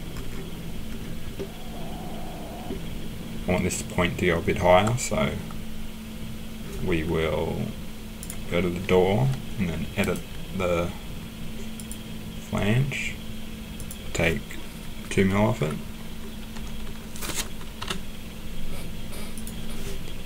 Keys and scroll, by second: 16.5 BackSpace, 17.8 7.